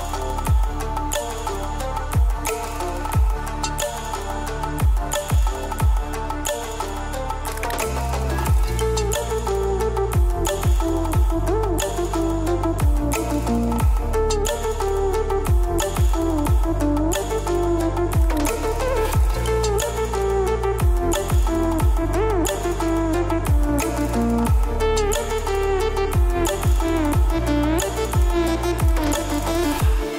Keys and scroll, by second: 17.9 ctrl+z.